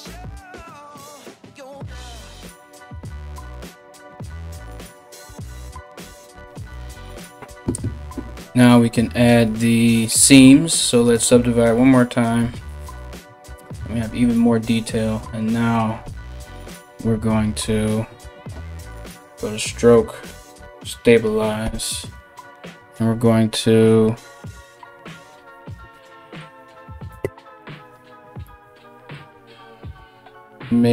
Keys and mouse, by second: 16.4-17.2 typing, 27.0 ctrl+z.